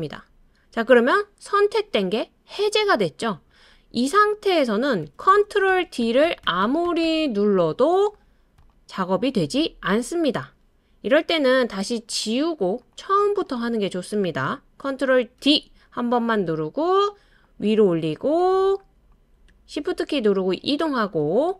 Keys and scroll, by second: 5.0 super+d, 5.3 super+d, 5.7 super+d, 6.0 super+d, 6.2 super+d, 6.4 super+d, 11.8 BackSpace, 15.4 super+d.